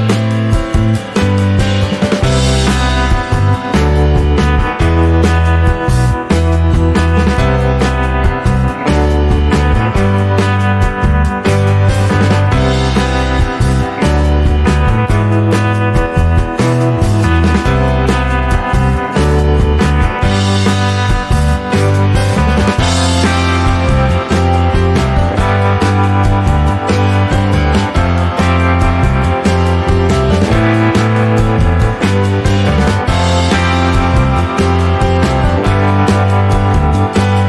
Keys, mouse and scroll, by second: 0.4 click, 0.8 alt+middle click, 1.8 alt+middle click, 2.7 click, 4.7 scroll down 3, 4.8 middle click, 5.7-6.1 scroll up 2, 6.1-10.8 shift+middle drag, 10.8-14.0 drag, 17.9 ctrl+s, 18.4-19.4 middle drag, 19.4 click, 19.9 Tab, 20.2 right click, 20.9 click, 21.8 Tab, 22.8 middle click, 23.1 Tab, 23.4 a, 23.8-24.9 right drag, 24.9-26.4 middle drag, 26.4 Tab, 26.6 click, 27.0 middle click, 27.6 Tab, 27.9 click, 30.3-32.5 drag, 32.5-34.4 middle drag, 34.4 click, 35.8 click.